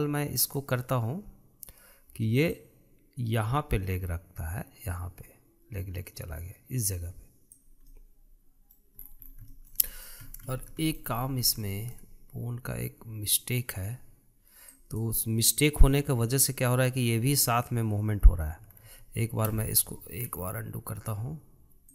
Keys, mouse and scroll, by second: 3.2 click, 8.7-9.8 middle drag, 9.8-10.3 scroll up 5, 10.3-11.0 shift+middle drag, 11.0 scroll down 2, 11.3-11.9 shift+middle drag, 11.9-12.5 scroll up 7, 12.5-15.5 shift+middle drag, 15.5 click, 16.9 scroll down 1, 19.8 ctrl+z, 20.4 ctrl+z.